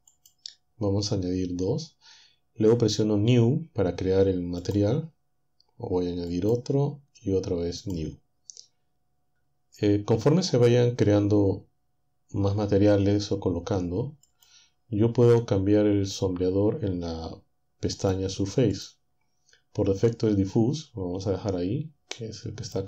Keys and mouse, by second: 0.1 click, 4.6 click, 6.3 click, 7.8 click, 14.2 click, 18.0-19.2 drag, 22.2 click.